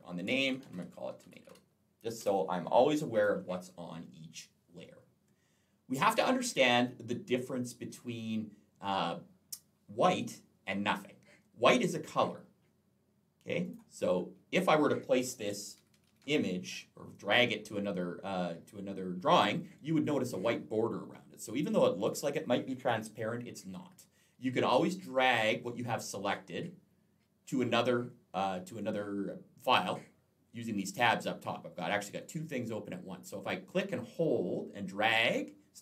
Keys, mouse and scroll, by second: 0.3-2.0 typing, 3.0 click, 13.5 click, 15.3-16.0 typing, 21.9 click, 33.9 click.